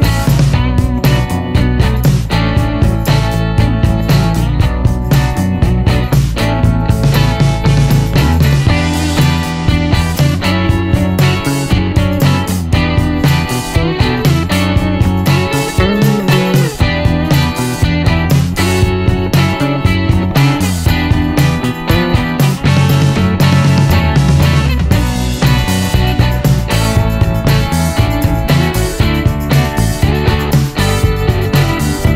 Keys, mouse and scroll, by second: 1.8 click, 3.6 click, 5.4 click, 7.0 click, 8.9 click, 10.2 e, 11.9 middle click, 12.7-14.0 scroll down 6, 14.2-15.4 drag, 16.7-17.1 scroll up 2, 17.7-18.1 scroll up 2, 19.8-20.9 middle drag, 22.2 click, 23.4 shift+r, 25.3-26.5 typing, 30.1-30.5 scroll up 1, 30.5 middle click, 30.8-31.1 scroll up 1, 31.1 scroll down 1, 31.2 middle click, 31.5-31.9 scroll up 1, 31.9 scroll down 1, 32.0-32.1 scroll up 1.